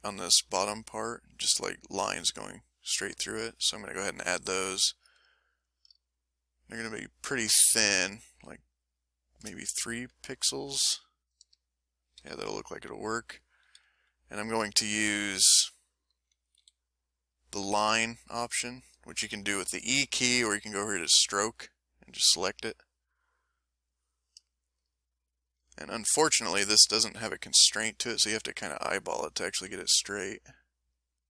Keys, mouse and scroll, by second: 0.5-1.6 ctrl+middle drag, 6.0-9.1 shift+drag, 10.6 click, 12.2 ctrl+z, 14.4 click, 15.5 s, 15.9 middle click, 16.6 e, 18.4 click, 20.4 click, 21.2 click, 22.0 click, 23.8 click, 24.5-26.5 middle drag, 28.8-31.2 drag.